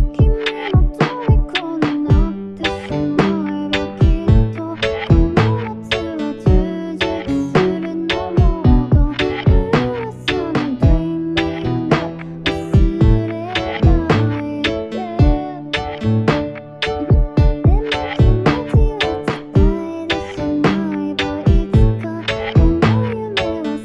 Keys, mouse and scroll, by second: 2.2 u, 2.7 u.